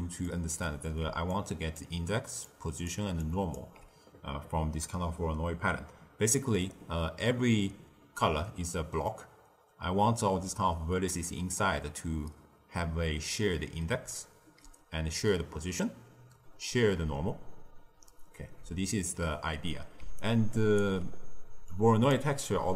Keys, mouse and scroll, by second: 0.2-1.0 ctrl+middle drag, 1.0 d, 1.2-1.7 drag, 1.7-2.2 d, 2.4-2.8 drag, 2.8-3.7 d, 3.2 click, 3.5 d, 10.3-11.2 d, 13.9 d, 14.4 d, 15.3 d, 18.0 d, 18.4 d, 18.5 d, 20.0 d, 20.1 right click, 20.7 d, 20.8 d, 21.6 click, 22.7 d.